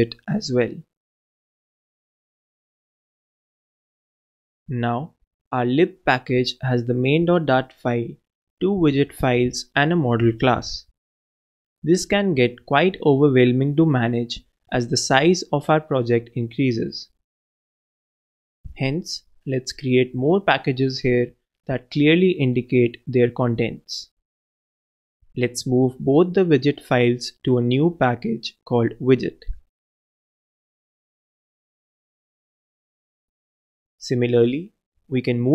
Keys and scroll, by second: 1.7-2.9 typing, 5.0 super+Return, 5.0 super+v, 5.4 super+Return, 6.9 alt+Down, 7.9 alt+Return, 8.2 alt+Down, 9.4 super+Return, 9.4 super+a, 10.0 alt+super+l.